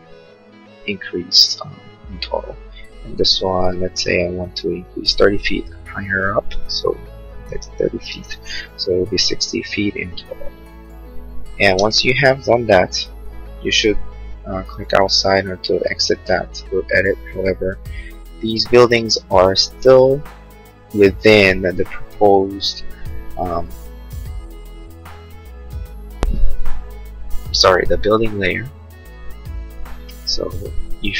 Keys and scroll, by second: 6.4-7.8 typing, 10.7 space.